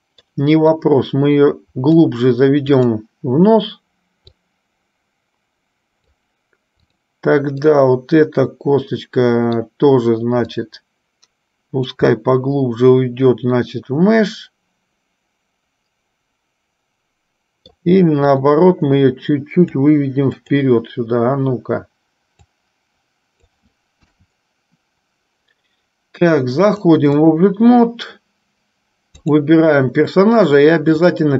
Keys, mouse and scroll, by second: 1.1-2.3 drag, 2.8-3.8 drag, 4.8-6.3 drag, 8.0-9.8 middle drag, 11.0-12.0 drag, 12.4-18.1 middle drag, 18.6-19.9 drag, 22.8 click, 24.1 KP_1, 26.9 click, 29.4 click, 30.9 shift+click.